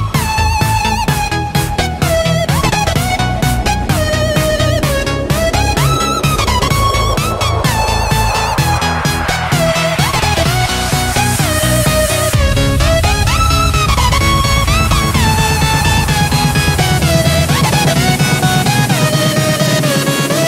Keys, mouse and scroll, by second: 0.6-7.6 drag, 7.7 Tab, 7.9 right click, 8.8 click, 9.2-10.8 typing, 11.9 click, 13.7 right click, 14.7 Tab, 14.8 F10, 15.2-16.4 drag, 15.5-17.8 typing, 17.8 Return, 18.8 click.